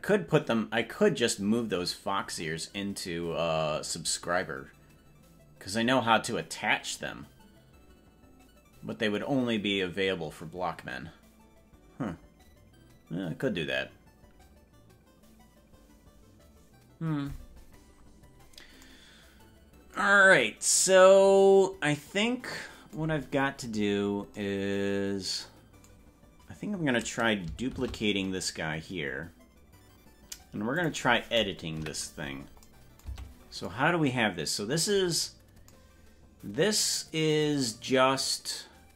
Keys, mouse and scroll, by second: 23.3-24.5 scroll up 12, 28.5 shift+d, 31.9 KP_Decimal, 33.1 Tab, 35.3-35.7 scroll up 5.